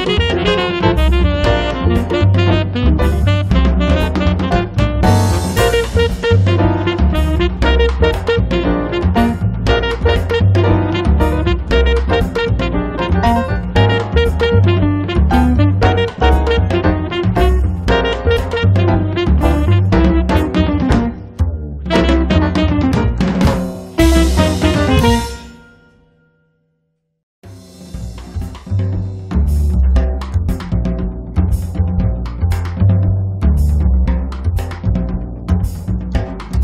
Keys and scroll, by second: 2.2 space, 6.6 space, 20.4 l, 21.7-22.7 typing, 25.9-26.8 typing, 33.6 l, 35.1 space, 36.3 p.